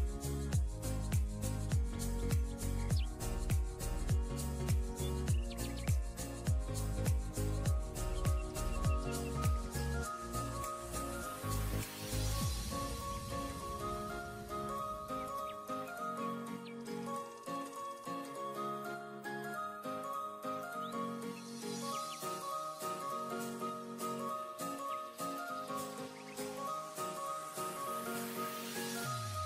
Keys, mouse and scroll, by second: 13.3 scroll down 1, 14.5-15.1 scroll down 2, 16.0 alt+scroll up 8, 16.2-16.6 scroll down 1, 16.7-17.0 alt+scroll up 1, 17.4 alt+scroll up 1, 17.7-18.0 scroll down 1, 18.4 ], 18.8 ], 23.9-24.2 scroll down 1, 24.2 typing, 28.4 alt+scroll down 1.